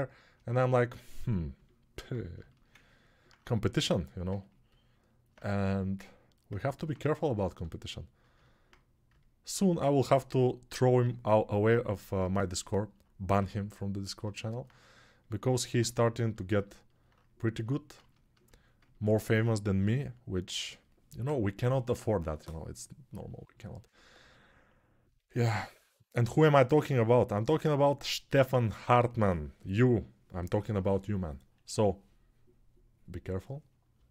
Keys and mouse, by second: 1.6-4.1 alt+right drag, 4.1-34.1 ctrl+alt+drag, 10.8 6, 13.1 g, 19.5 g, 25.2 g.